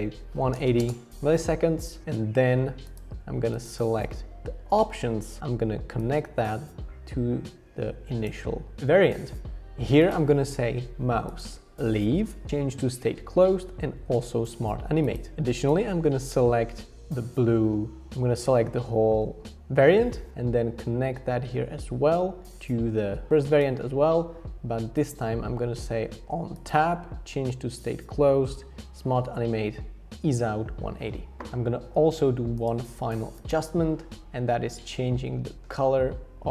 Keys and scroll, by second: 0.0-1.1 typing.